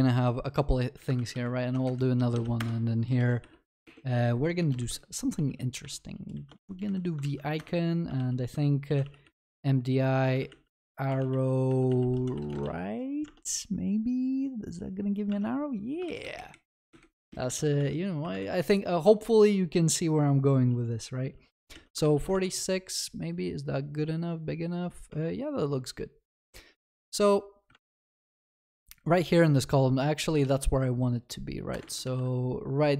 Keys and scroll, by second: 1.1 ctrl+s, 6.5 Return, 7.2 ctrl+s, 12.7 ctrl+s, 15.3 ctrl+s, 18.5 ctrl+s, 25.2 ctrl+s, 31.8 ctrl+v, 32.0 ctrl+s.